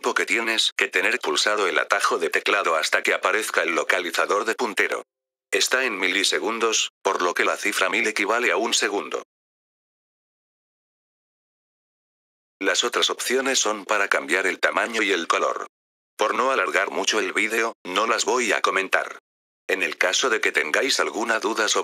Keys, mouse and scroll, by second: 1.1 click, 1.8 click, 12.4 click.